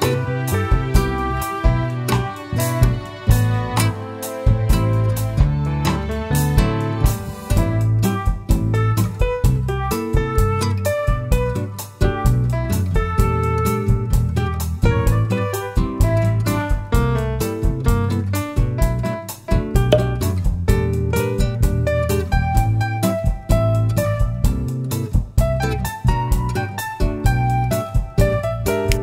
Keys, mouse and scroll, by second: 1.0 Tab, 1.8 shift+middle drag, 2.9 Tab, 3.7 alt+click, 4.6 s, 6.3 click, 6.4 ctrl+z, 10.8 click, 11.2-14.6 middle drag, 12.2-12.6 scroll up 2, 12.6 Tab, 14.6-18.1 drag, 18.5 click, 19.6 /, 20.6 Tab, 21.1-22.8 shift+middle drag, 22.1-22.8 scroll up 2, 23.7 3, 24.4 click, 25.4 scroll up 1, 26.7 i.